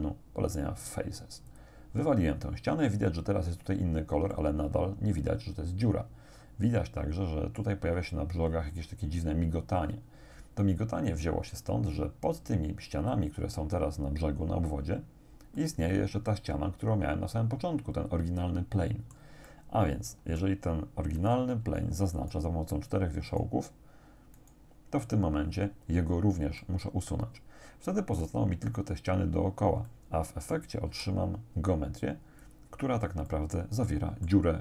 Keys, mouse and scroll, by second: 1.5 click, 4.4 middle click, 4.7-7.8 drag, 8.4-10.6 scroll up 4, 10.8-12.2 scroll down 4, 15.6-19.4 drag, 19.5-20.6 drag, 21.2 right click, 22.2 shift+right click, 23.3 shift+right click, 24.4 shift+right click, 26.6-28.4 drag, 29.9 middle click, 30.3 click, 30.9 x, 32.4 click, 33.3-34.5 drag.